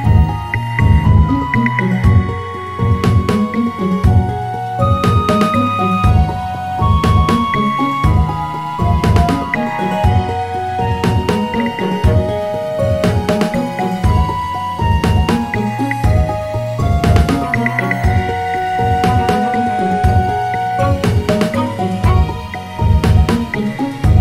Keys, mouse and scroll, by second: 1.1-4.1 drag, 5.9-9.0 drag.